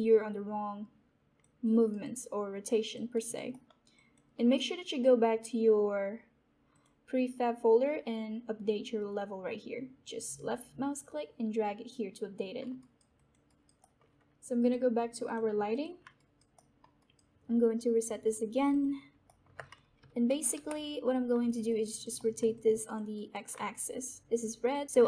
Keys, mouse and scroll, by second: 1.6 alt+right click, 2.0-3.4 alt+drag, 3.4 alt+right click, 3.5 alt+middle click, 3.9 alt+click, 6.3 typing, 6.6 click, 12.5 click, 12.7 alt+right click, 13.1 alt+click, 13.4 alt+right click, 13.7 alt+middle click, 14.6-15.9 drag, 16.1 alt+right click, 16.4 alt+right click, 18.6 click, 19.2 alt+middle click, 19.4 alt+middle click, 19.8-20.9 typing, 21.4 alt+click, 22.1 alt+right click, 22.4 alt+click, 23.1 alt+right click, 24.3-25.0 alt+drag.